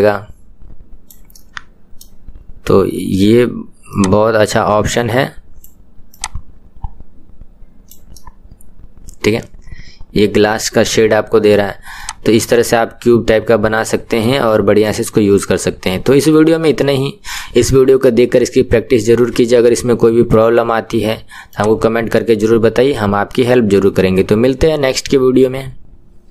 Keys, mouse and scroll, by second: 1.4-4.2 middle drag, 4.2-8.2 drag, 8.2-12.2 middle drag, 12.2-14.9 drag, 14.9-17.8 middle drag, 21.7-23.3 drag, 23.3-26.3 middle drag.